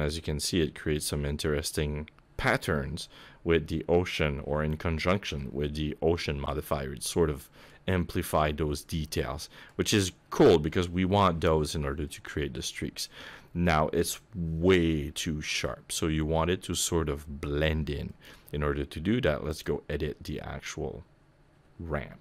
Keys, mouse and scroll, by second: 6.6 middle click, 9.0 middle click, 12.0 middle click, 12.8 scroll up 1, 13.0 middle click, 18.0 middle click, 19.4 click.